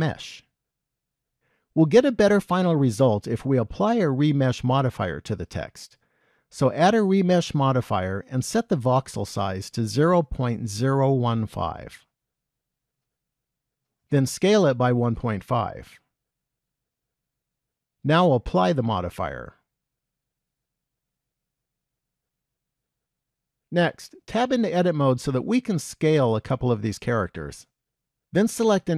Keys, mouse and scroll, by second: 5.0 click, 6.5 click, 10.4 click, 14.7 s, 18.8 click, 21.9 shift+middle click, 24.4 Tab.